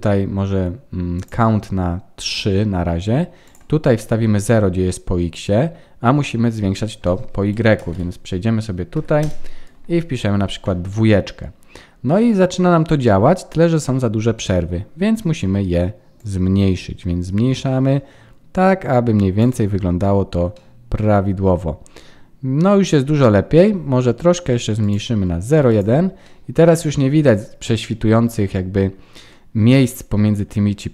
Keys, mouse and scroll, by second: 1.1 click, 3.4 click, 10.9 middle click, 13.3 scroll up 3, 14.0-14.3 scroll up 3, 14.3 middle click, 16.1 click, 19.8-20.5 scroll up 3, 20.5 middle click, 20.5-21.4 scroll up 1, 24.8 click, 25.6 click, 26.2 middle click, 30.5-30.9 scroll down 4.